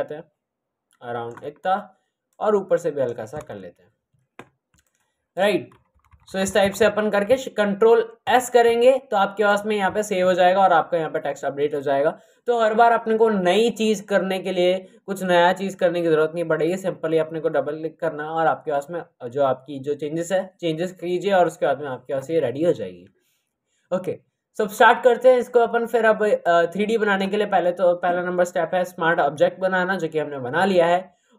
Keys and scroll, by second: 3.4 Return, 6.0 Up, 6.2 Up, 6.3 Up, 6.5 Up, 7.2 c.